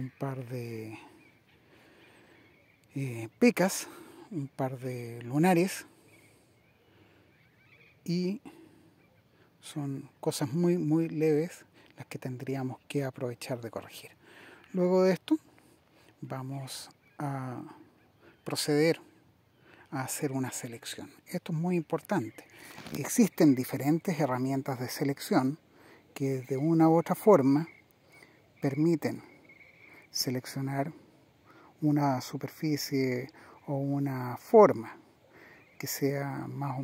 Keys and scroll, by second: 28.6 super++, 34.3 super++.